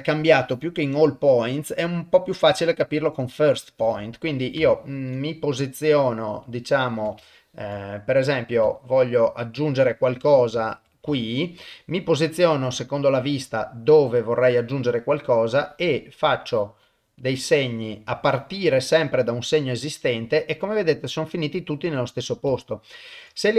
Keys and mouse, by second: 0.1-3.8 drag, 4.7 ctrl+middle click, 5.2-6.3 middle drag, 6.5 shift+middle click, 7.3 ctrl+middle click, 7.8 middle click, 8.8 ctrl+middle click, 9.2 ctrl+middle click, 9.9 middle click, 11.2 shift+middle click, 11.6-14.6 middle drag, 15.4 click, 19.6-22.3 middle drag, 22.6 ctrl+middle click, 23.4 middle click.